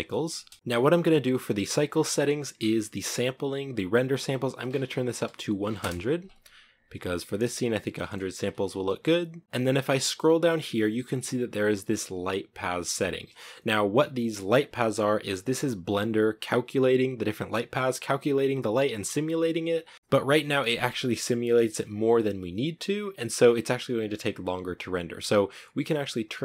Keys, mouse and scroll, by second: 0.0 middle click, 0.4 space, 0.6-5.4 scroll down 1, 5.4-5.8 scroll down 1, 5.8 0, 6.9-7.4 scroll up 1, 7.4 shift+middle click, 7.9 shift+scroll up 1, 7.9-9.4 shift+middle drag, 9.4 scroll down 1, 10.1-10.4 scroll down 2.